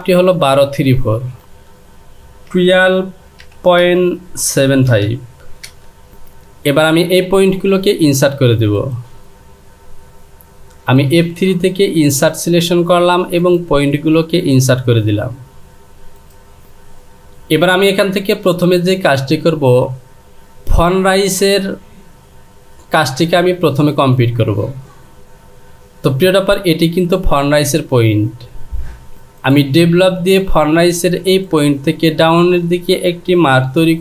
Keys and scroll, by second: 1.3 Down, 5.7 typing.